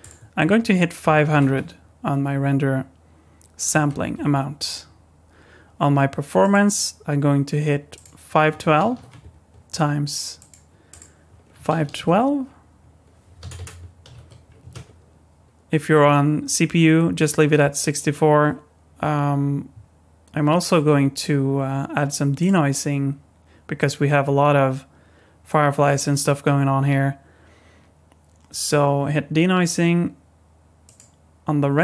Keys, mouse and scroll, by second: 0.0 click, 1.4 KP_0, 6.4 click, 7.9 click, 10.9 click, 13.5 BackSpace, 22.4 click, 30.8 click.